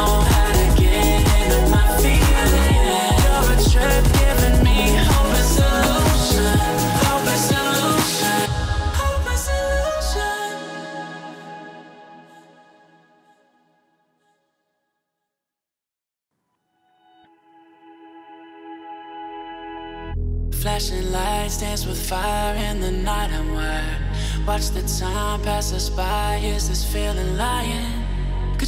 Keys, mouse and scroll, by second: 1.4-1.8 alt+scroll up 1, 1.8 click, 3.7 click, 4.3-4.7 click, 4.8 ctrl+z, 5.0-5.8 click, 5.9 right click, 6.4 click, 7.9 click, 8.0-9.2 typing, 10.1 click, 11.0-11.4 alt+scroll up 2, 11.8-12.5 drag, 14.2-16.5 drag, 16.7 alt+scroll up 1, 17.3-18.0 click, 18.1 alt+scroll down 1, 18.2 alt+scroll up 1, 18.3 alt+scroll down 1, 18.7 click, 19.1 alt+scroll down 1, 19.8 alt+scroll up 1, 21.5-24.5 drag, 25.9 ctrl+a, 26.6 click.